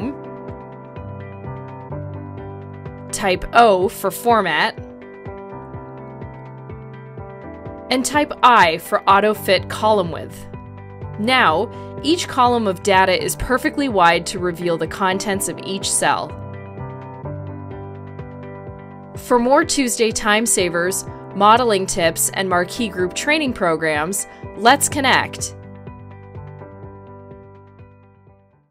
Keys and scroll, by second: 4.8 o, 9.7 i.